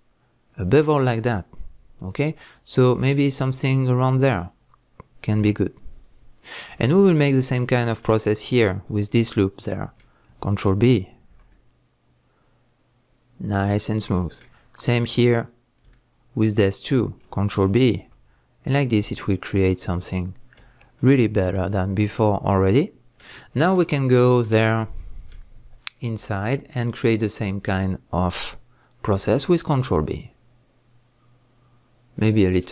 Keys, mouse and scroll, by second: 6.0 click, 6.4-6.9 scroll down 1, 6.9-8.8 shift+middle drag, 7.7 scroll up 1, 8.8 alt+click, 9.3-13.7 middle drag, 11.3 ctrl+b, 13.7 click, 14.1-15.4 middle drag, 15.4 alt+click, 16.4 alt+shift+click, 17.9 ctrl+b, 20.2 click, 20.4 scroll down 1, 20.6 Tab, 20.9-26.4 middle drag, 23.3 scroll down 1, 23.9 scroll up 1, 25.6 Tab, 26.4 alt+click, 26.8 scroll up 1, 27.1-32.7 middle drag, 29.1 ctrl+b.